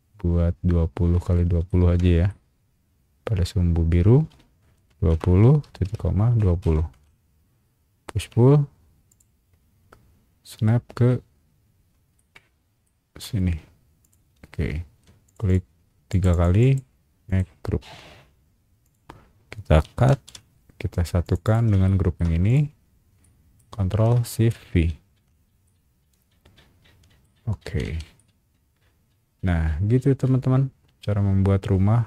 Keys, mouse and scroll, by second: 1.3 scroll up 1, 1.7 shift+middle click, 4.9 KP_2, 5.1 KP_0, 5.8 ;, 6.4 KP_2, 6.9 KP_Enter, 7.8 scroll down 1, 8.2 p, 9.1 click, 9.5-10.0 scroll down 2, 11.8 scroll up 1, 12.1 middle click, 14.0 click, 14.8 space, 15.2 click, 15.4 click, 16.1 click, 16.3 click, 16.6 click, 17.2 right click, 18.8 click, 20.1 ctrl+x, 21.2 click, 21.4 click, 21.8 shift+middle click, 22.5 shift+click, 23.2 shift+middle click, 24.9 ctrl+shift+v, 25.6-27.2 middle drag, 27.2 scroll up 1, 27.4 scroll down 1, 27.6 Escape, 28.1-32.0 middle drag.